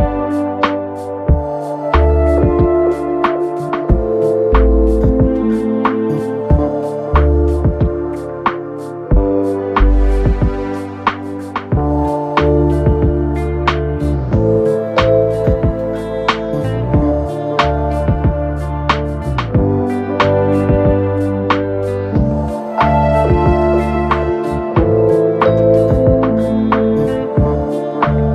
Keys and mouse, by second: 1.3 alt+click, 2.5 4, 3.3 alt+middle click, 4.5 F1, 6.4 shift+i, 7.4 alt+middle drag, 8.2 F1, 10.2-10.6 alt+middle drag, 11.1 r, 12.0 alt+x, 13.6 click, 16.4-20.0 drag, 21.2-21.5 alt+drag, 22.1-23.3 alt+drag, 23.9 alt+click, 26.0 click, 27.5 alt+middle drag, 28.2-28.3 alt+drag.